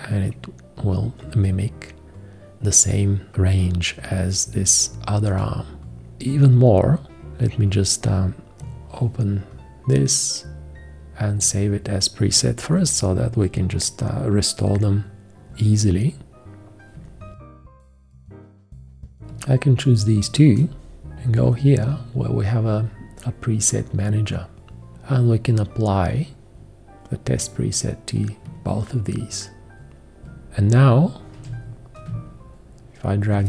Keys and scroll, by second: 19.2 v, 31.4 g.